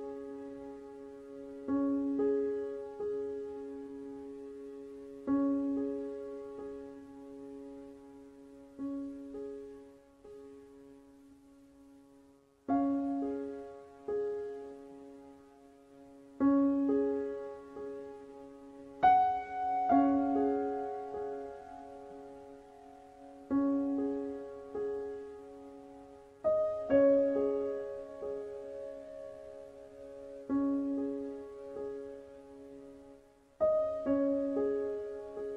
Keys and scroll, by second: 22.8 Right, 32.9 KP_2.